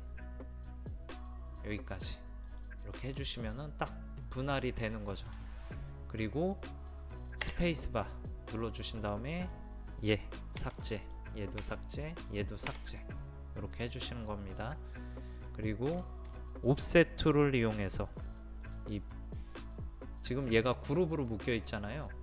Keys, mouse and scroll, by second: 3.0 middle click, 3.4-4.6 scroll down 1, 4.6 middle click, 8.2 space, 9.4 click, 10.6 Delete, 11.0-13.2 drag, 11.6 Delete, 12.7 Delete, 13.2 middle click, 14.8-15.5 scroll down 1, 15.5 scroll up 1, 16.1 shift+middle click, 16.8-18.6 scroll up 1, 18.6 click, 21.7 middle click.